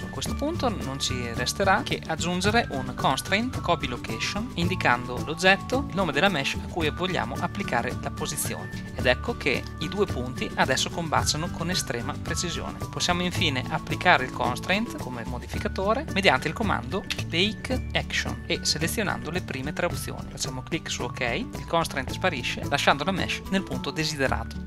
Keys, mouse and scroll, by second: 0.1-1.4 drag, 2.5 ctrl+Down, 5.8 super+z, 17.1 space.